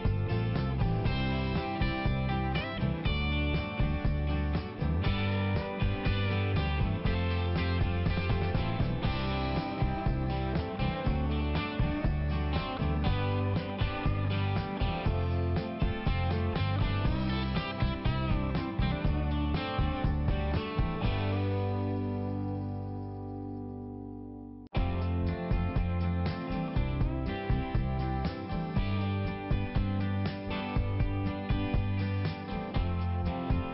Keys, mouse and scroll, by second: 0.3 click, 0.6 right click, 0.7 double right click, 1.0 ,, 1.1 click, 1.3 click, 2.2 click, 3.7 click, 6.0 click, 6.8 click, 8.7 middle click, 9.2-10.1 scroll down 1, 11.9 click, 13.6 right click, 14.7 click, 17.2 click, 17.8 click, 19.7 click, 21.8 click, 23.0 click, 24.7 click, 26.2 click, 26.3 click, 27.5-28.2 scroll up 1, 28.4 click, 29.4 click, 30.9 click.